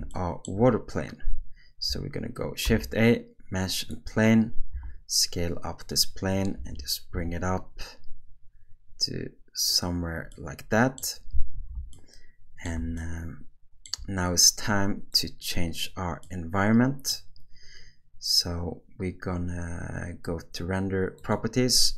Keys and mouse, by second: 0.1-0.4 shift+middle drag, 2.6 shift+a, 4.7 s, 6.6 g, 10.3-11.0 middle drag, 11.5 alt+a, 11.9-12.6 middle drag, 13.0-13.8 shift+middle drag, 15.1 click, 16.2-17.1 middle drag, 21.2 click.